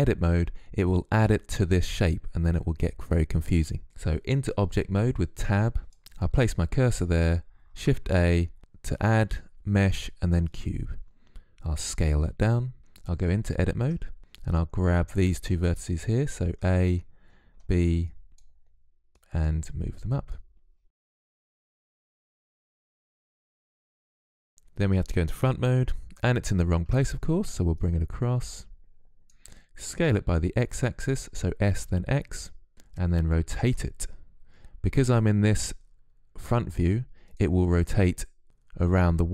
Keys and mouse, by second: 5.8-7.0 drag, 7.0 shift+a, 11.5 s, 13.2 Tab, 15.9 a, 16.8 b, 18.4-20.4 drag, 21.4 a, 21.6 b, 22.0 click, 22.8 a, 22.8 b, 23.2 click, 24.4 KP_1, 26.2 Tab, 27.1-29.4 drag, 29.4 s, 33.0 r.